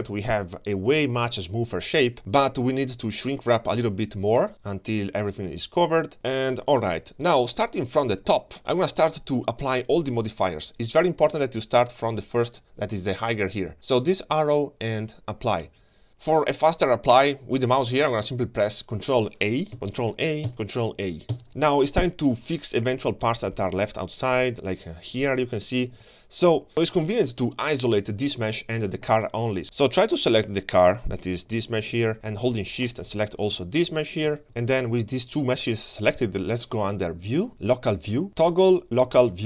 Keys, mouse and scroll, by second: 0.3-0.9 scroll down 1, 0.9-2.2 scroll up 2, 4.4-6.8 shift+drag, 13.7 click, 19.7 ctrl+a, 20.5 ctrl+a, 21.5-21.9 scroll down 3, 21.9-22.5 scroll up 2, 22.5-23.2 middle drag, 23.5-23.9 shift+scroll down 2, 23.9 middle click, 24.6-26.0 scroll up 2, 26.3-26.7 scroll up 1, 26.7-27.1 scroll down 1, 27.1 middle click, 27.9 g, 28.8-29.6 scroll up 2, 29.6 shift+middle click, 29.6-30.1 scroll down 2, 30.1 click, 30.9 g, 32.2 scroll up 1, 32.9 shift+click, 33.5 g, 34.4 middle click, 34.4-36.3 scroll down 1, 36.3-39.4 drag.